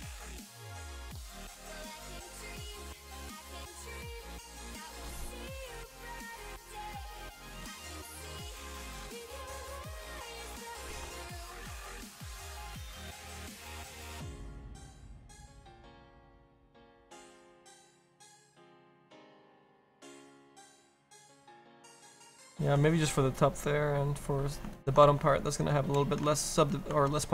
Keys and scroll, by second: 1.0 ctrl+z, 2.8 ctrl+z, 17.8 ctrl+z, 18.2 s.